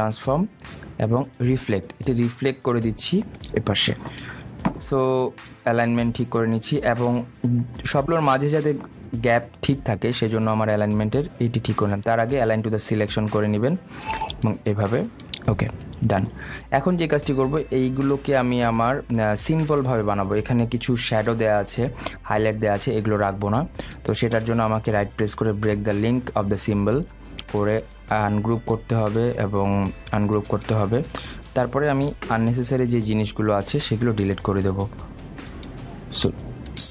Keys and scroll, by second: 32.7 Delete.